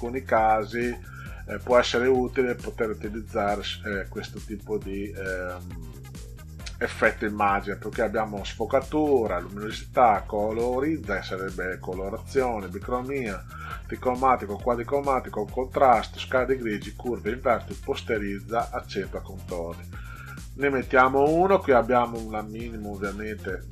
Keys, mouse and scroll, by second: 2.7 click, 19.9 click, 21.9 click, 22.2 click, 22.8 click, 23.0 click.